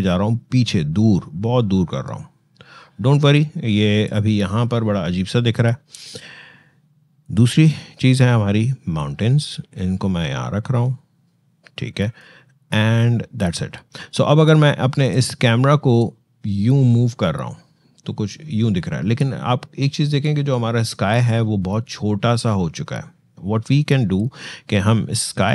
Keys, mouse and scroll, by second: 4.4-14.5 shift+drag, 14.8-25.5 shift+drag.